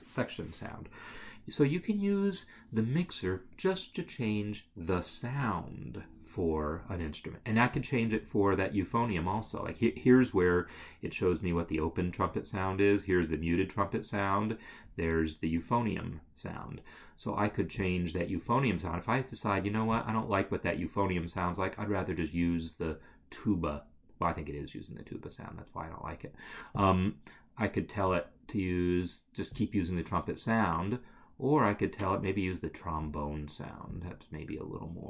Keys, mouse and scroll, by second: 7.8 click, 17.8-19.3 scroll, 20.2 click, 26.8 click, 29.6 click, 34.0 click.